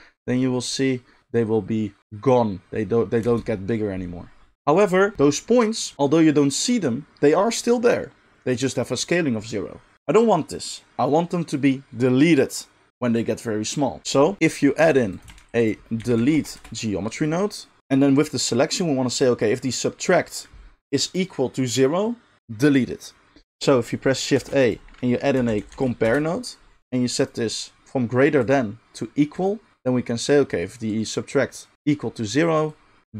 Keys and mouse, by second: 3.2 space, 14.8 g, 15.2-28.4 shift+middle drag, 15.3 shift+a, 24.3 shift+a, 28.4-33.1 drag.